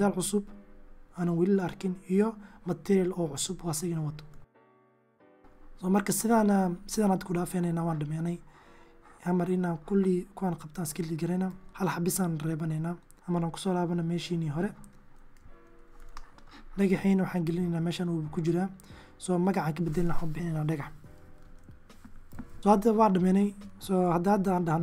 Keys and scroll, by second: 2.3 shift+d, 3.5 shift+d, 10.7 x, 11.7 x, 12.8 x, 14.5 1, 22.6 1, 24.0 s.